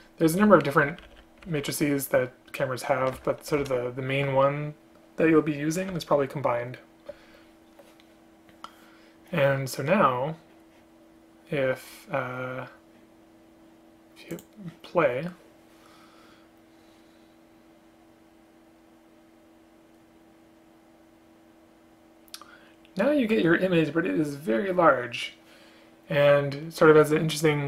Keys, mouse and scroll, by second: 1.0 Down, 1.1 Down, 1.2 Down, 6.0 Return.